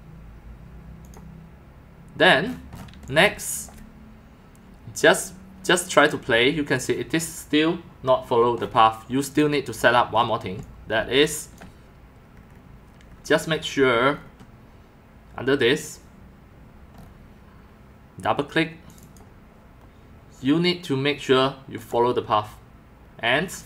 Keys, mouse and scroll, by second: 1.0 click, 2.9 x, 3.1-3.6 drag, 3.3 c, 4.9-5.6 typing, 5.9 click, 9.3 drag, 9.7 click, 10.3-12.0 typing, 10.6-11.0 drag, 16.4-17.1 typing, 16.9-17.5 right drag, 18.9 click, 19.0 click, 21.8 click.